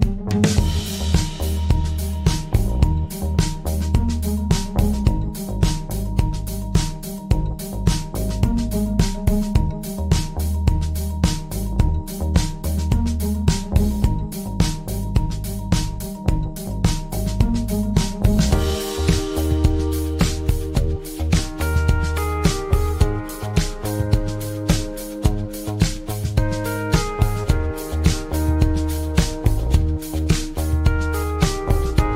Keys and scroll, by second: 2.8 ctrl+z, 6.1 ctrl+z, 15.4 ctrl+z.